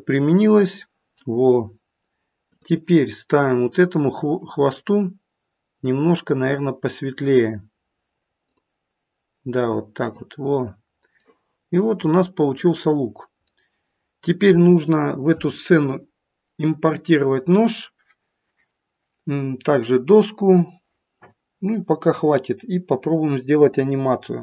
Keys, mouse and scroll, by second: 0.3 click, 1.4 scroll down 2, 2.4 click, 6.0 click, 10.7-11.2 scroll down 1, 11.2 middle click, 13.0-13.5 scroll down 1, 13.5 middle click, 15.0-16.0 scroll down 1, 23.8-24.4 scroll down 3.